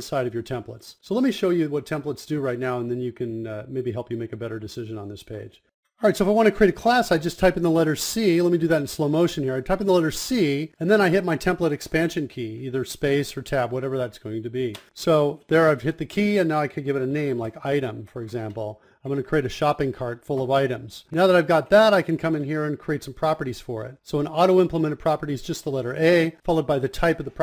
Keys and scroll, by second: 0.9-3.4 typing.